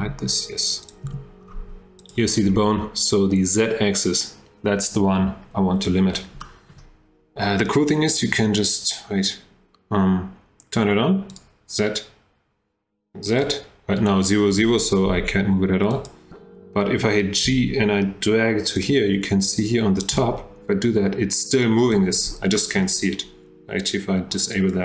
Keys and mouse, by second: 0.8 click, 1.1 h, 6.4 shift+middle drag, 11.3 click, 13.3 click, 15.1 g, 17.5 g, 20.1 g, 22.6 shift+drag, 24.5 click.